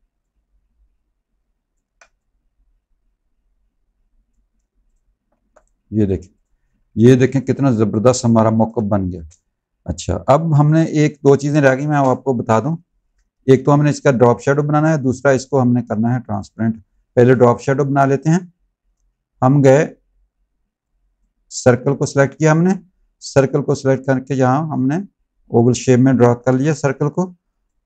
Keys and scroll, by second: 5.2 z, 6.7 z, 8.6 space, 10.4 v, 11.5 space, 15.8 space, 26.3 v.